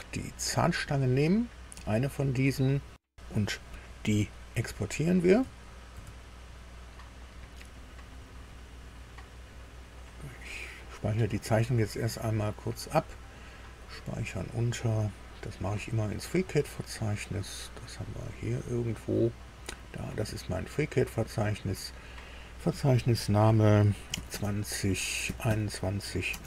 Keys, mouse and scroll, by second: 0.1 click, 5.9 ctrl+e, 10.8 click, 12.3 click, 13.7 click, 15.4-16.9 scroll down 8, 17.7 scroll down 2, 18.3 scroll up 2, 20.2 click, 21.9 click, 24.1-26.4 typing.